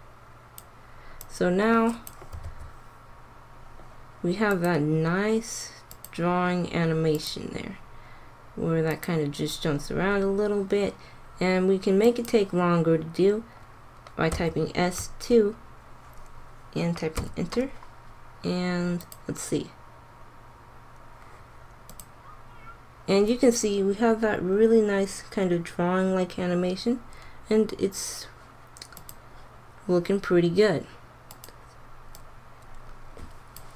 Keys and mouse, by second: 1.3 click, 2.4 alt+a, 4.5-5.6 drag, 12.0 click, 14.2 s, 18.9-20.7 drag, 28.9-30.7 drag, 31.2-33.7 drag.